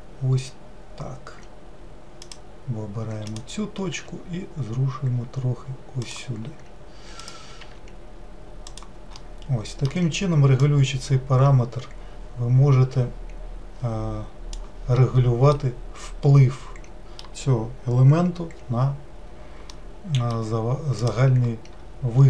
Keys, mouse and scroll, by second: 3.3 click, 4.0 g, 7.2 click, 7.7 g, 9.3-10.8 middle drag, 10.8-13.7 drag, 15.6-21.0 middle drag, 21.0-22.2 drag.